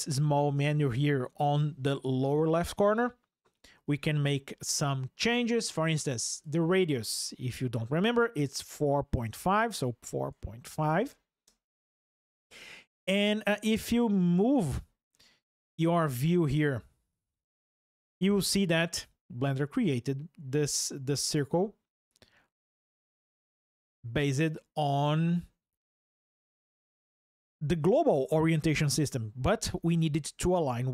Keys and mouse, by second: 3.6 ctrl+alt+o, 6.1-11.9 drag, 14.5 ctrl+alt+o.